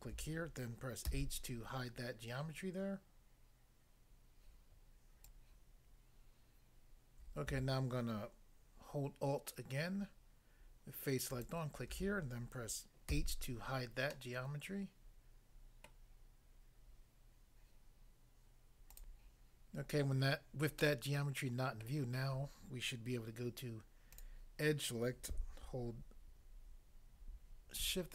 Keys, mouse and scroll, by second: 1.1 h, 5.2 click, 11.3 alt+click, 13.1 h, 14.1 middle click, 15.9 middle click, 18.9 click, 19.2 click, 20.8 middle click, 21.8 middle click, 24.2 click.